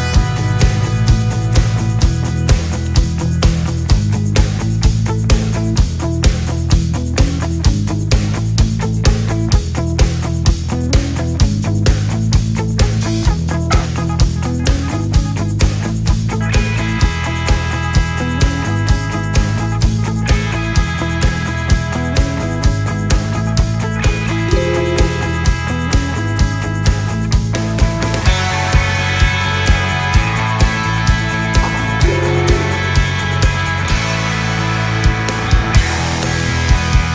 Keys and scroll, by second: 9.9 ctrl+z, 24.3 alt+space, 31.8 alt+space.